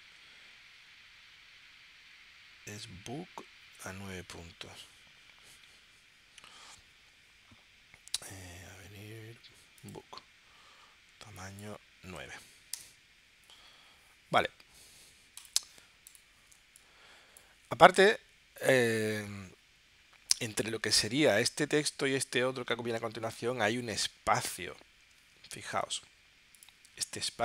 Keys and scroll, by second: 12.2 9, 12.8 Return, 16.6 space.